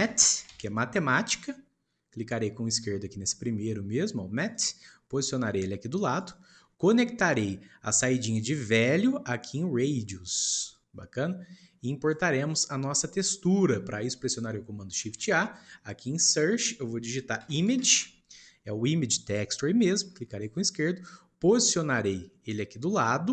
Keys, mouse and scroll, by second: 6.8-8.6 shift+middle drag, 8.6 click, 10.7 click, 12.4-13.5 shift+middle drag, 13.5 shift+click, 15.0 shift+a.